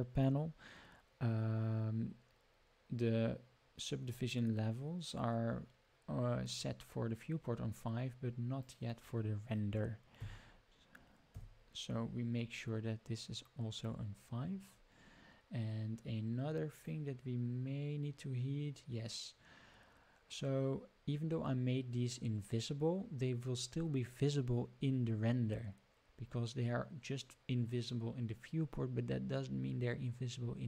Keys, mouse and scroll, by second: 8.5-11.9 drag, 16.7 click.